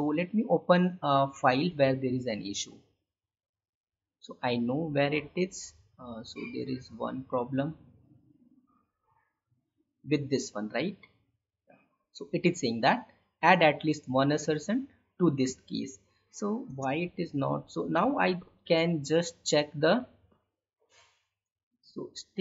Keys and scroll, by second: 16.6 space.